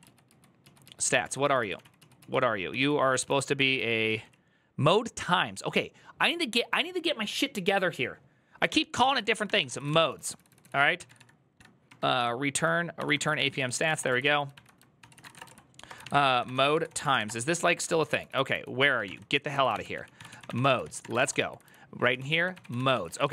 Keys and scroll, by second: 0.6 ctrl+u, 1.5 ctrl+u, 1.5 ctrl+w, 1.6 ctrl+o, 2.3-4.7 typing, 9.5-23.3 typing, 12.8 Tab, 12.9 ctrl+c, 13.2 ctrl+c, 14.8 ctrl+c, 15.2 Return.